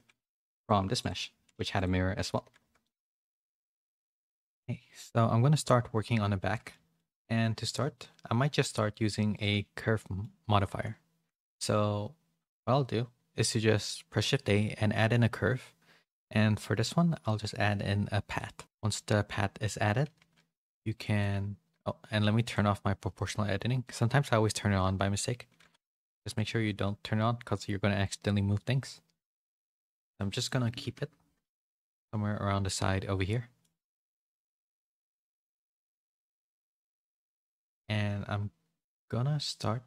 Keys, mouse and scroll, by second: 0.3 a, 1.0 click, 1.5 a, 1.7 click, 2.1 middle click, 2.3 a, 2.8 middle click, 2.8 a, 6.5 middle click, 7.0 shift+middle click, 10.0 middle click, 10.6 shift+a, 18.8 middle click, 22.4-26.5 drag, 26.5 r, 30.9 KP_7, 31.7 g, 33.5 middle click, 34.2 middle click, 34.9 middle click, 37.1 Tab.